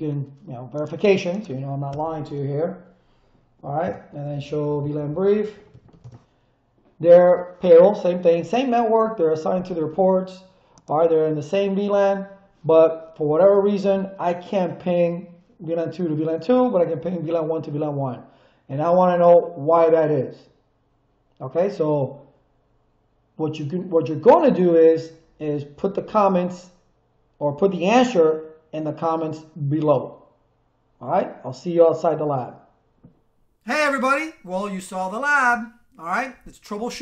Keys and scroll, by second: 1.9 Return, 3.5-5.9 typing, 3.8 Return, 6.0 Return.